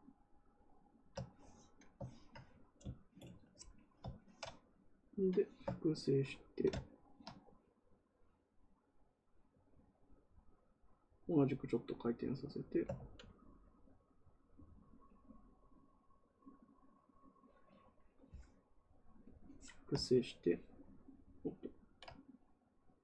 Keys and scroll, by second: 12.9 ctrl+z.